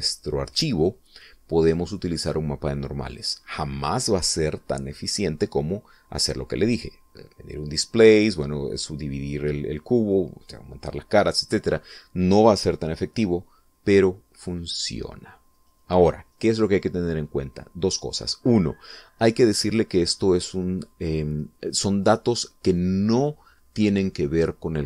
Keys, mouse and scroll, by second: 8.2 click, 9.7 click.